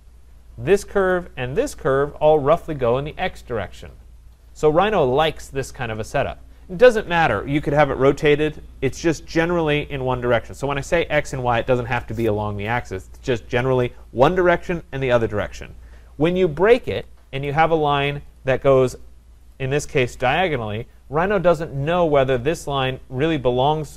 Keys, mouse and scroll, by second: 1.1 click, 2.4 shift+click, 16.7 Escape, 16.9 Escape, 17.5 click, 18.4 click, 19.5 click, 20.1 Return, 22.5 click.